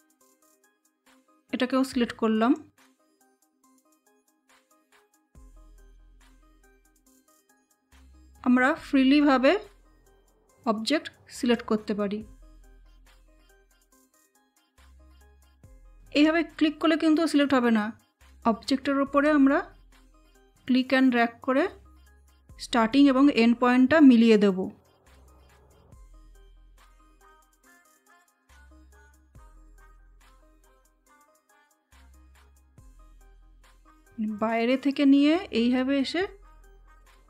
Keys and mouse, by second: 0.3-26.2 shift+drag, 26.2-31.4 shift+drag, 31.4-37.2 shift+drag.